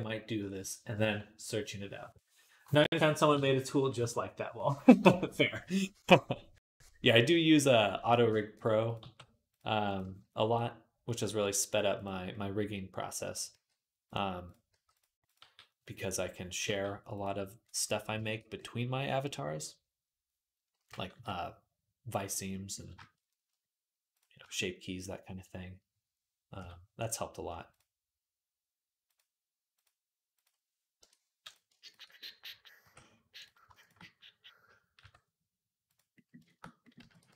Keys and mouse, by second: 7.7 shift+middle click, 8.7 click, 8.8-36.5 middle drag, 8.8 g, 9.8 g, 11.0 g, 13.3 g, 14.5 g, 15.2 g, 16.4 g, 20.9 KP_3, 26.4 k, 32.6 j, 34.8 j, 36.8 x.